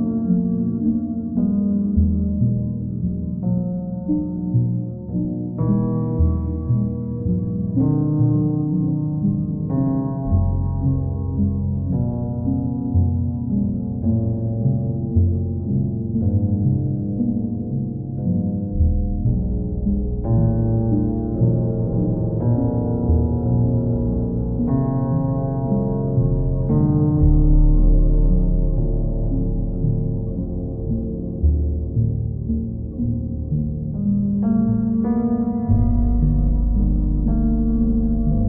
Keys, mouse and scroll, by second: 1.6 click, 4.2 click, 4.4 shift+click, 4.9 alt+click, 5.4 alt+click, 5.6 shift+click, 6.5 alt+click, 8.2 alt+click, 10.0 alt+click, 11.5 ctrl+click, 11.6 ctrl+click, 11.9 alt+click, 12.0 ctrl+click, 12.5 w, 13.3 alt+click, 13.7 ctrl+click, 14.2 ctrl+click, 14.8 w, 18.3 click, 19.6 q, 20.0 click, 20.6 alt+click, 20.9 ctrl+click, 21.5 alt+click, 22.9 right click, 24.8 click, 26.3 click, 28.4 click, 28.6 ctrl+z, 29.5 right click, 30.4 click, 33.2 click, 33.4 ctrl+z, 37.9 click.